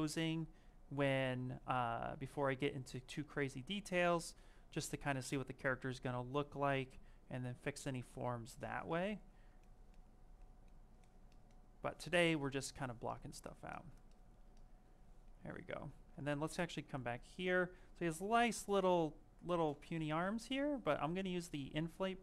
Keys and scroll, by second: 15.8 s, 19.7 i, 20.9 d, 22.1 s.